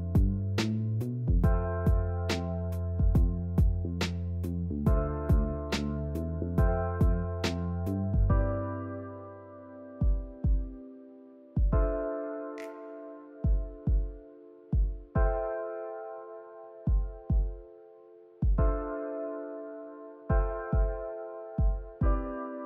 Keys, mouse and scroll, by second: 0.0 scroll down 1, 0.2-1.4 shift+middle drag, 1.4 click, 1.5 scroll up 1, 1.7 middle click, 1.8 3, 2.1 middle drag, 2.4 scroll up 1, 2.8 i, 4.4 KP_3, 5.1-5.4 drag, 5.4 shift+middle click, 5.7 e, 7.6 s, 8.3 1, 8.7 drag, 9.3 s, 11.3 click, 11.8 ctrl+r, 13.7 ctrl+r, 15.1 ctrl+r, 16.3 ctrl+r, 18.8 ctrl+r, 20.3 ctrl+r, 21.6 click, 22.2 ctrl+r.